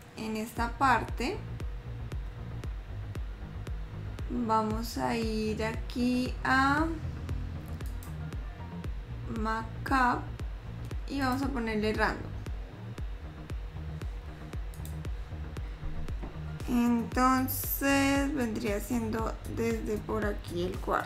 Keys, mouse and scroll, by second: 15.0 click, 17.0 middle click, 20.3-21.0 scroll up 2.